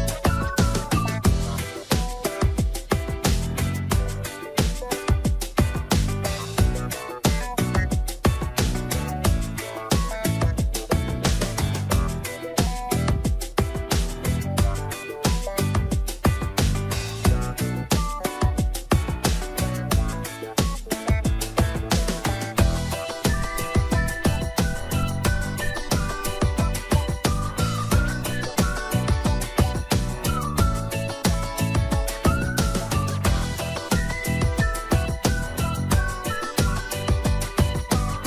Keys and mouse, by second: 0.0 middle click, 0.7 shift+middle click, 2.0 alt+h, 2.8 shift+middle click, 3.1 middle click, 3.6 middle click, 4.5 shift+middle click, 6.1 2, 6.7 click, 7.8-11.1 typing, 11.7 Tab, 12.1 shift+middle click, 13.0 middle click, 13.5 Tab, 14.1 middle click, 15.3 1, 15.7 click, 16.4 click, 16.9 click, 18.2 shift+middle click, 18.5 middle click, 19.0 Tab, 19.5 Tab, 19.9 click, 20.7 click, 21.1 Tab, 21.3 middle click, 22.5 middle click, 23.2 Tab, 23.7 middle click, 24.4 middle click, 25.2 middle click, 26.1 ctrl+click, 27.0 Tab, 27.3-28.4 middle drag, 28.9 shift+middle click, 30.0 shift+middle click, 30.7 shift+middle click, 31.1 Tab, 31.7 middle click, 32.0-33.6 middle drag, 35.3 shift+middle click, 36.4 click.